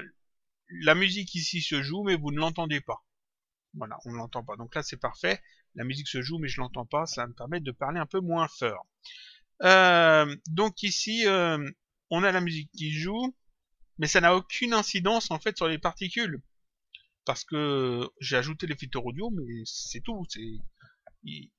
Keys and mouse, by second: 2.3 click, 3.6 click, 8.3 click, 17.9 click.